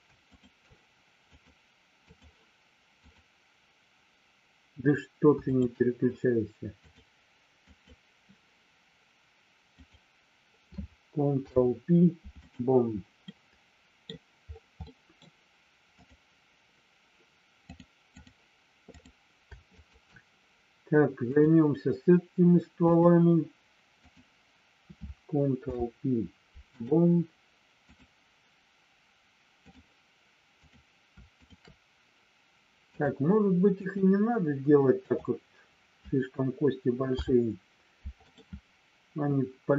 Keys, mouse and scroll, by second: 0.3 shift+click, 1.4-2.4 drag, 5.4 shift+click, 6.8-7.9 drag, 11.3 ctrl+p, 13.3 middle click, 14.8 middle click, 15.9 click, 17.6 click, 18.9 click, 19.8 shift+click, 21.3-23.2 drag, 24.0 click, 25.5 ctrl+p, 27.8-29.8 drag, 30.5 click, 31.3 shift+click, 32.9-34.0 drag, 37.0 ctrl+p.